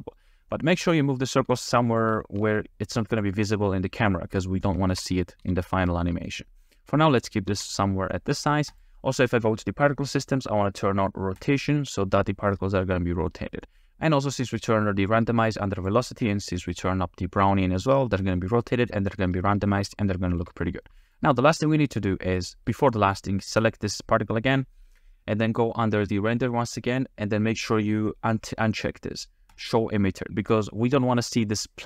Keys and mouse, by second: 0.0 drag, 0.6 click, 1.4 g, 2.2 shift+drag, 2.9 g, 3.1-3.8 drag, 4.9 shift+click, 5.4 s, 6.2 middle click, 6.7 middle click, 7.5 s, 7.7 click, 8.8 click, 11.4 click, 14.6 click, 15.8 click, 18.6 click, 20.1 shift+drag, 20.8 middle click, 23.6 click, 25.1-29.5 middle drag.